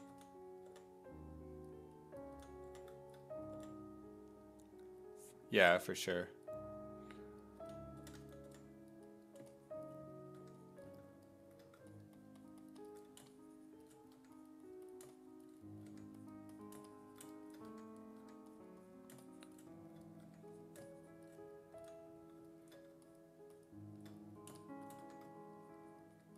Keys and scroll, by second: 0.0-0.7 typing, 2.4 s, 2.7 5, 3.6 5, 5.6 5, 7.4-9.0 typing, 10.4 1, 14.2 1, 15.9 1, 17.7 1, 18.2 1, 20.3 1, 21.8 s, 25.0 1.